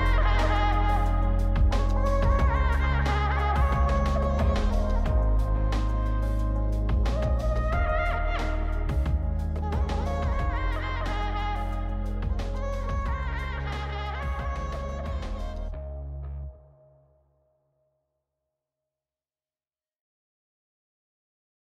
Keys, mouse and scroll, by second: 0.4 click, 1.3-4.7 drag, 5.4-6.1 middle drag, 6.6 click, 7.3 shift+click, 8.1 ctrl+c, 13.5 click, 14.5 click, 15.3 click, 15.8 shift+click, 16.6 ctrl+c, 20.4-21.0 scroll up 2, 21.0-21.6 middle drag.